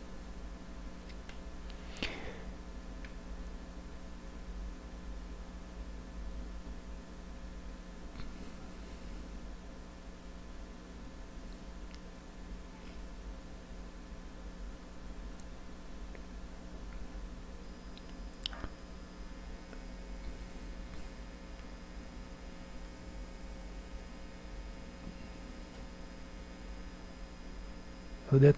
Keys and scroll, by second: 2.1 4, 2.7 Return, 7.0 c.